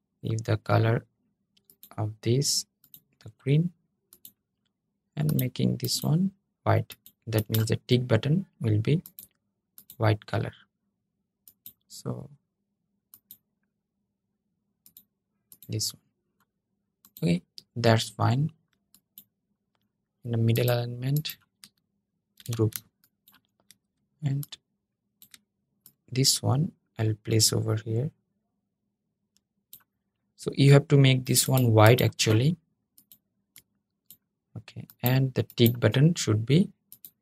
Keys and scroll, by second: 22.1 super+g.